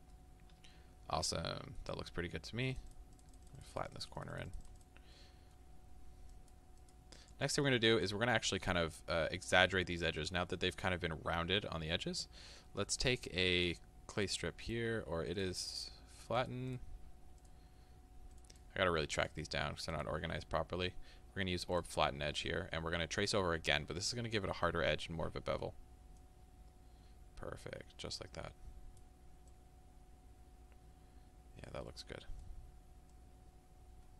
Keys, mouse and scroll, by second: 0.2-2.8 middle drag, 2.8-5.2 drag, 5.2-6.3 middle drag, 6.3-7.4 drag, 7.4-20.1 middle drag, 20.1-23.0 drag, 23.0-26.2 middle drag, 26.2-31.9 drag, 31.9-33.2 middle drag, 33.2-34.1 drag.